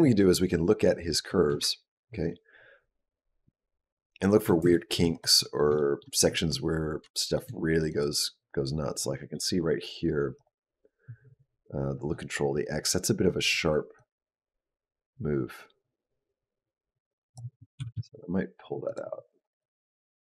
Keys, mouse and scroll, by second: 1.1 shift+middle click, 2.5 ctrl+middle click, 4.5 shift+middle click, 4.9 click, 5.6 shift+middle click, 6.9 shift+middle click, 7.7 click, 10.2 click, 13.9 click, 17.6 g, 19.5 click.